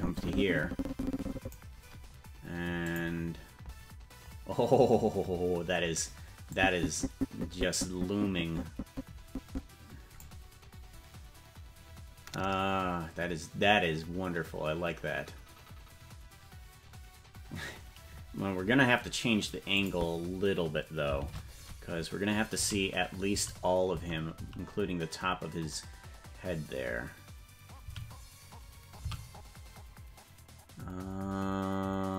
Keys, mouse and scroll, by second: 2.9 click, 6.6-10.6 drag, 14.5-15.2 scroll up 3, 16.1 scroll down 1, 19.7 click, 21.6 shift+`.